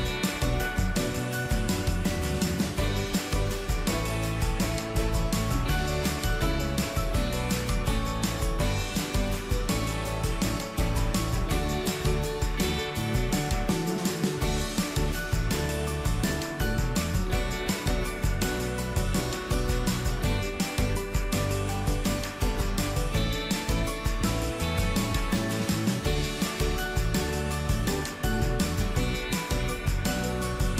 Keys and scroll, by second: 14.0 ctrl+z.